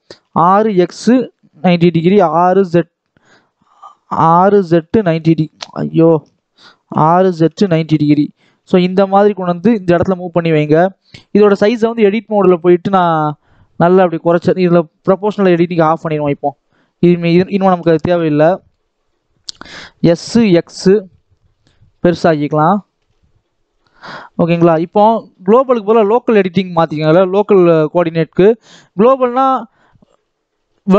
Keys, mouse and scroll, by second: 0.1 r, 1.8 t, 2.2 z, 4.1 r, 5.6 Escape, 6.1 ctrl+z, 6.8 r, 8.3 g, 10.0 scroll down 1, 10.1 middle click, 11.0-12.0 scroll up 1, 12.0-13.4 drag, 13.4 s, 15.2 click, 15.7 s, 17.6 KP_7, 18.1 scroll up 1, 18.4 shift+middle click, 18.9 scroll up 1, 19.2 scroll down 1, 19.9 s, 22.4 shift+middle click, 22.8 s, 23.9 shift+middle click, 24.3 Tab, 24.9-27.3 drag, 27.3 t, 29.1 scroll down 1, 29.4-30.9 middle drag.